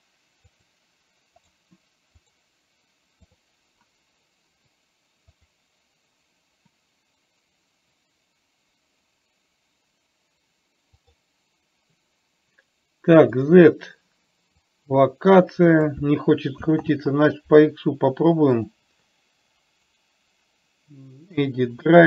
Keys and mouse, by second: 0.9 click, 13.8 click, 15.2-16.3 drag, 17.4 ctrl+z, 20.3-22.0 right drag.